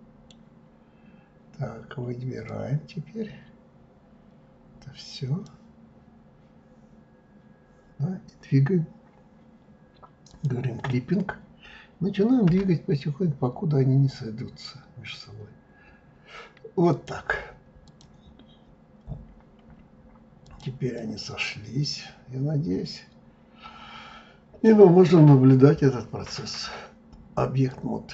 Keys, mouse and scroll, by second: 0.7-1.3 scroll up 2, 1.3-2.5 scroll down 1, 2.5-5.5 drag, 10.3 click, 12.5 g, 17.9 click, 18.4-19.0 scroll down 3, 19.0-20.5 scroll down 5, 20.5 click, 21.0-24.0 middle drag, 24.7-26.5 scroll down 4, 26.5-28.1 drag.